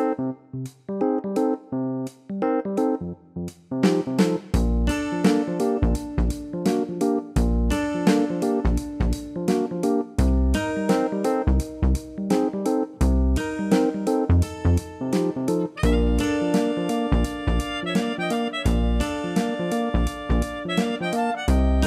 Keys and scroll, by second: 4.6 ctrl+i, 20.2 ctrl+i.